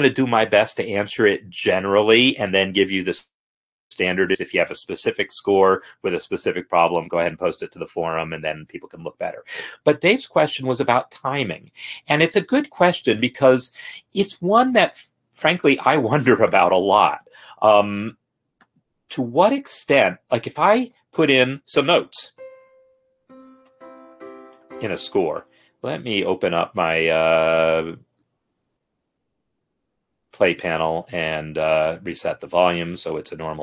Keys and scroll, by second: 21.2 n, 23.4 ctrl+Down, 23.4-24.8 typing, 25.6 Escape, 26.7 ctrl+F10.